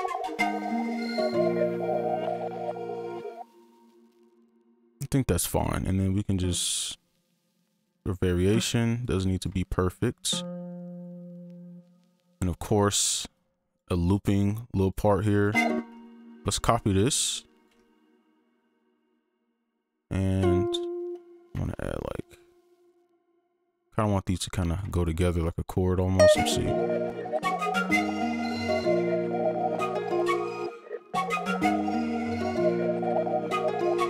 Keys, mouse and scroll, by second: 0.3 space, 2.8 click, 3.3 alt+space, 3.7 ctrl+a, 4.3 shift+click, 5.6 right click, 5.6 shift+click, 9.0 alt+click, 12.1 alt+click, 14.3 alt+click, 14.3 double click, 15.7 space, 16.0 ctrl+click, 17.8 ctrl+click, 19.6 right click, 21.3 click, 21.6 click, 24.0 click, 25.0 click, 25.4 right click, 30.8 space, 31.4 scroll up 1, 32.2 scroll up 1, 32.4-33.4 scroll down 1.